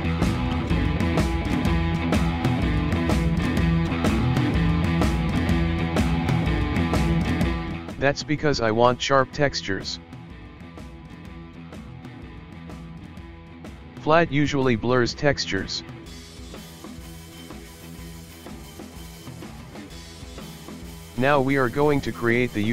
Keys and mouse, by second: 8.2-11.2 drag, 13.7-16.4 drag, 18.7-21.7 drag.